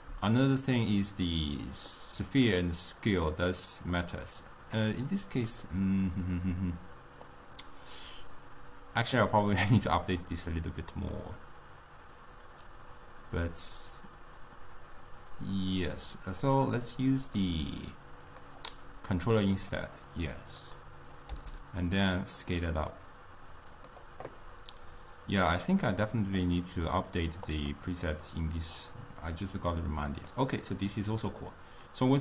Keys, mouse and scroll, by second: 4.3-5.0 drag, 5.0-7.4 middle drag, 7.4-13.5 drag, 16.6 click, 17.3 click, 18.3 click, 19.3 click, 19.6 click, 21.3 s, 27.6 click, 30.3-32.2 middle drag.